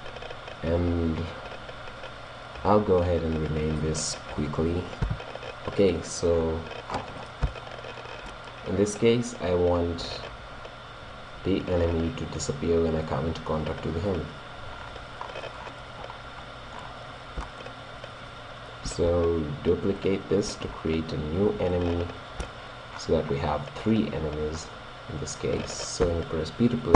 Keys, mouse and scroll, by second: 5.0 click, 5.7-9.7 middle drag, 14.7-18.7 middle drag, 19.0 shift+d, 20.1 click, 20.6 shift+d, 22.5 middle click, 23.7-26.5 middle drag, 26.9 p.